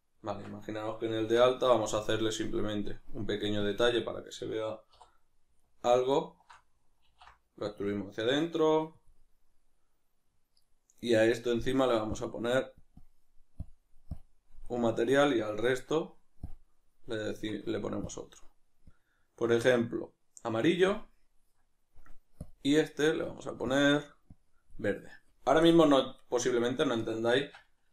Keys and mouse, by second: 0.3 Tab, 4.1 right click, 4.4 middle click, 4.9 3, 5.6 alt+right click, 6.1 alt+shift+right click, 7.0 alt+e, 9.0 click, 17.3 Tab, 17.3-26.2 drag, 26.2-27.4 right drag, 27.4 Tab.